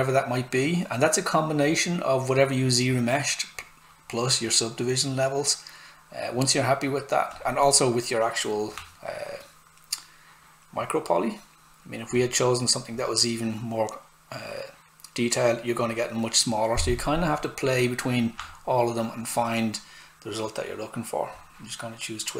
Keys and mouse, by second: 7.3 click, 12.1 click, 18.3 click, 21.3 click.